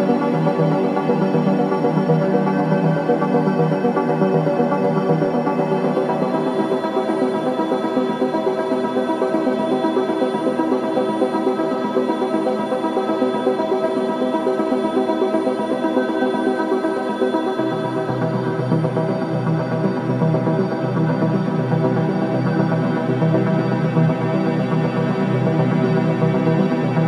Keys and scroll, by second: 7.3 alt+space, 11.2-13.0 typing, 13.6 Return, 14.1-19.9 typing, 21.6-25.7 typing.